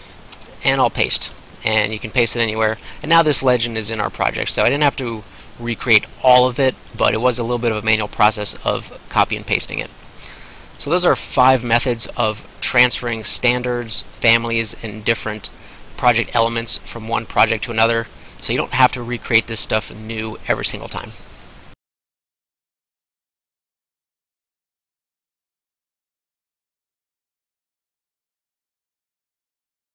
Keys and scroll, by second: 0.4 ctrl+v.